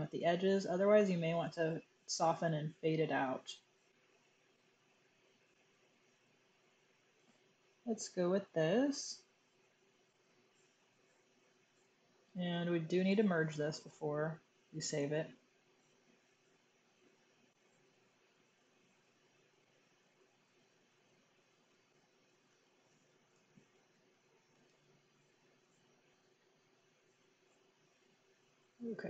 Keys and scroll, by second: 14.9 super+e, 21.7-24.9 typing.